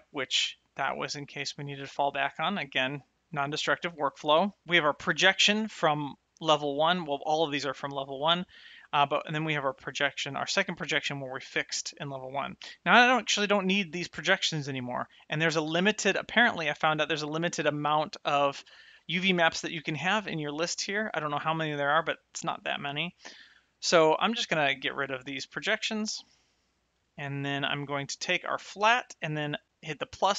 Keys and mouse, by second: 9.2 click, 24.5 click, 26.4 click, 27.1 click, 29.9 click.